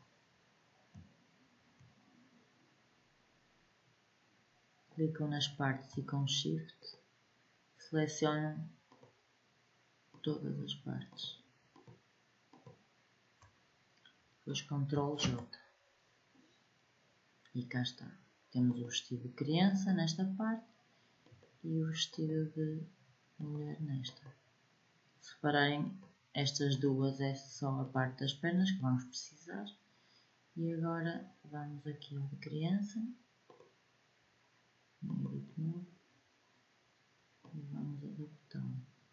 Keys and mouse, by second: 6.5-14.9 drag, 14.9 ctrl+j, 18.5-31.3 drag, 33.2-36.7 drag, 37.2-39.1 drag.